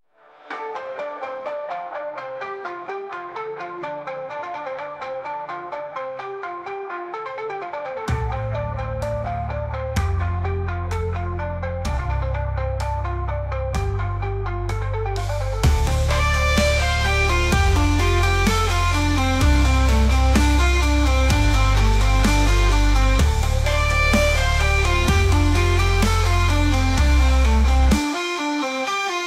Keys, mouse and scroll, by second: 0.0 click, 0.3 shift+click, 1.2 ctrl+KP_Subtract, 2.1-3.6 middle drag, 4.2 click, 4.9 m, 6.3 t, 7.3 click, 8.0-8.4 scroll down 2, 8.4 drag, 9.0-9.8 drag, 10.4 click, 11.6 ctrl+2, 12.4 click, 13.3-14.8 drag, 15.3 ctrl+z, 17.2-18.5 drag, 19.2 h, 19.5 click, 20.3 scroll down 2, 20.5-21.6 middle drag, 21.6 `, 22.5 g, 27.2-28.1 middle drag, 28.1-29.2 drag.